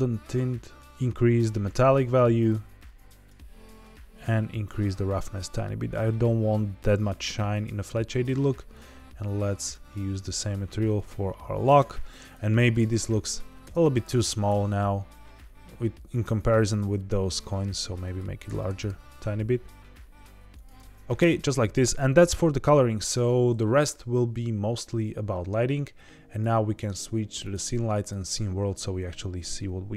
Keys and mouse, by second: 1.7 click, 2.5 click, 3.9-8.2 drag, 9.7 click, 12.3-12.8 drag, 13.6 Tab, 14.0 a, 14.4 s, 18.0 click, 18.4-19.3 typing, 20.5 click, 20.7 g, 20.9 y, 21.1 Tab, 26.3-28.2 drag.